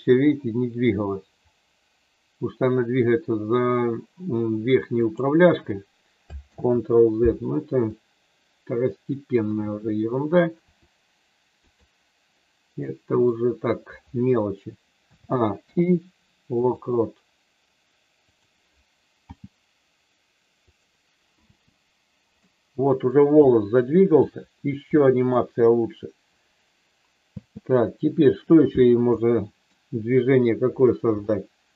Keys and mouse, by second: 4.9 click, 6.6 ctrl+z, 7.8-9.3 middle drag, 10.6 r, 11.6 click, 12.8 middle click, 14.9 a, 15.7 i, 18.3 click, 19.3 g, 20.7 click, 21.3 space, 22.3 middle click, 23.5 shift+middle click, 24.9 shift+middle click, 27.2 space, 29.2 middle click, 31.2 shift+middle click.